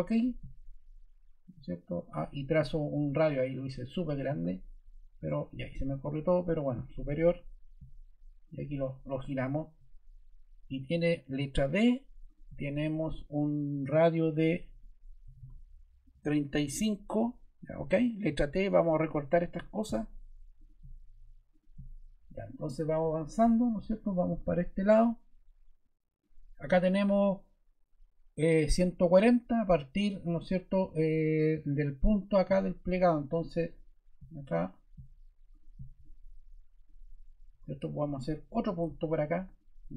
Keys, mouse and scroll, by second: 5.1 ↺, 11.2 d, 14.9-15.9 typing, 16.1 Return, 18.2 t, 37.4 ⟲.